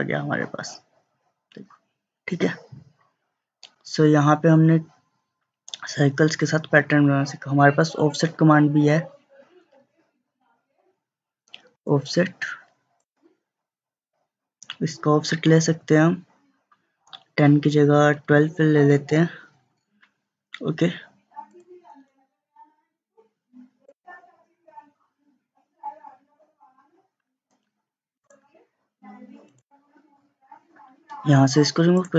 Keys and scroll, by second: 18.0-18.8 typing, 19.1 Return.